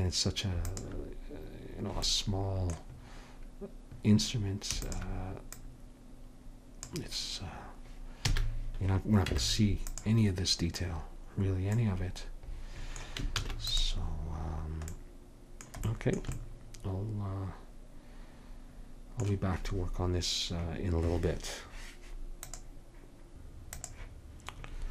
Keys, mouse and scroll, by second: 0.7-2.5 drag, 2.2-4.9 middle drag, 4.9-7.5 drag, 8.4 a, 9.3 Tab, 13.5 ctrl+s.